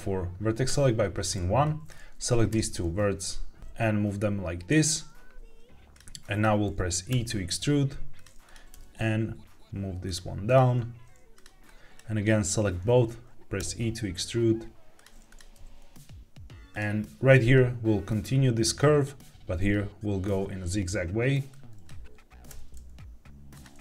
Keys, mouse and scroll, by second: 0.6 1, 1.5 click, 2.4 g, 3.6 click, 3.6 g, 4.6 click, 5.8 click, 6.1 click, 7.0 e, 8.1 click, 8.6 g, 10.0 click, 10.4 click, 10.6 g, 11.2 click, 11.6 click, 14.6 e, 14.9 click, 15.2 click, 15.4 g, 16.6 click, 21.4 click, 22.4 e, 23.4 click.